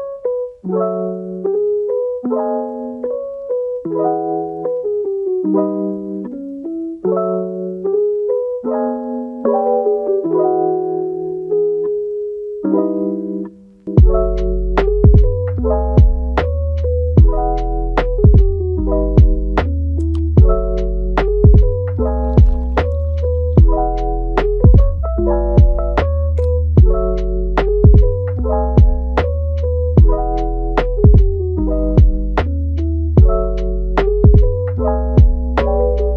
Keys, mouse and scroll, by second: 1.7 scroll down 1, 2.0 middle click, 2.6 scroll up 1, 2.9 middle click, 3.6 scroll down 3, 3.8-6.5 middle drag, 6.5-9.6 drag, 9.6-11.0 middle drag, 11.0-13.7 drag, 13.7 scroll down 2, 13.9 middle click, 14.7 scroll up 2, 14.9 shift+middle click, 15.4-15.8 scroll up 1, 15.8 scroll down 3, 16.0-19.0 middle drag, 19.0 scroll up 2, 19.2 shift+middle click, 19.8 scroll down 2, 20.1 middle click, 21.0-21.3 scroll up 2, 21.3-23.9 shift+middle drag, 23.9-24.6 scroll down 2, 24.6-25.3 scroll down 1, 25.3-27.0 drag, 27.0-27.4 scroll down 1, 27.4 shift+middle click, 27.9 scroll up 4, 28.5-31.4 shift+middle drag, 31.4-32.8 drag, 32.8 shift+middle click, 33.6 scroll up 1, 34.0 scroll down 2, 34.2 middle click, 34.8-36.1 scroll up 3.